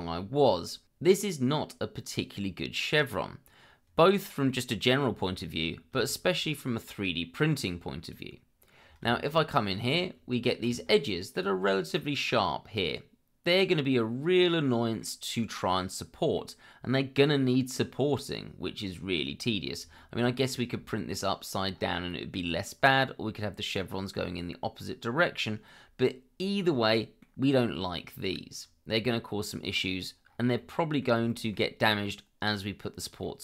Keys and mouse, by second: 0.0 middle click, 1.1-4.5 middle drag, 6.0-6.3 shift+middle drag, 8.0 click, 9.1 shift+middle drag, 9.7 middle click, 10.2 Tab, 11.3 click, 11.7-15.0 middle drag, 16.3-18.6 middle drag, 19.9 shift+middle click, 22.8 middle click, 25.6-27.2 middle drag, 27.9-29.7 middle drag, 30.5 middle click, 31.3 shift+middle click, 33.2-33.4 middle drag.